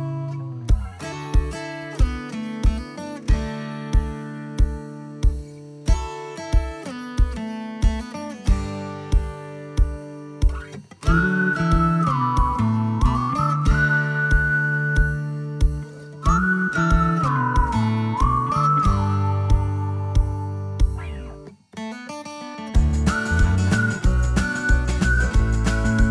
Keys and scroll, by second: 5.2 o, 10.1 space, 11.7 o, 16.1 space, 19.0 ctrl+g, 20.8 p.